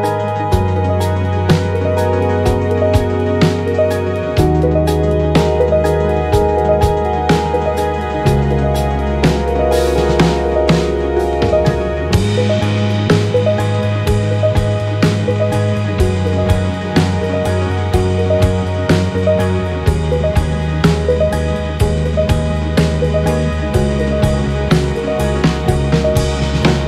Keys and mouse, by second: 3.2 click, 7.1 click, 7.6 click, 7.9 space, 19.4 space, 20.0-20.6 middle drag, 21.3-22.1 drag, 23.2-23.6 middle drag, 25.0 click, 25.8 shift+click.